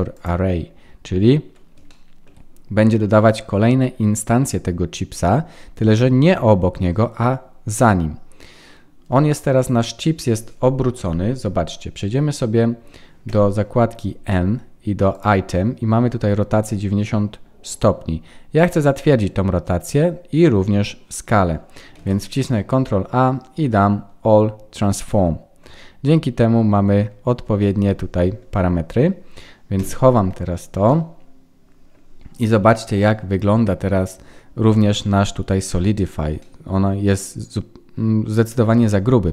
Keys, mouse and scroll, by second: 0.7-1.4 scroll down 7, 1.8 shift+middle click, 10.9 KP_1, 11.9-12.5 scroll up 1, 12.5-13.2 scroll up 1, 13.2 n, 15.1 click, 21.9 ctrl+a, 30.8 middle click, 32.2-32.6 scroll up 2, 32.6 middle click, 35.9-36.4 scroll up 5, 36.4 middle click, 38.7-39.3 scroll down 3.